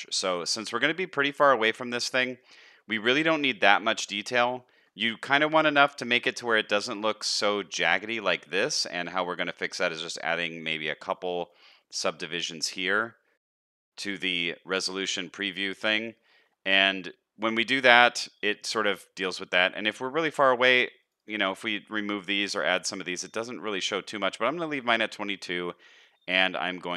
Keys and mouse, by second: 0.9-2.4 middle drag, 2.9 middle drag, 4.6 shift+middle drag, 5.3 shift+middle drag, 6.8 middle click, 13.5 middle click, 16.2 shift+middle click, 18.8 middle click.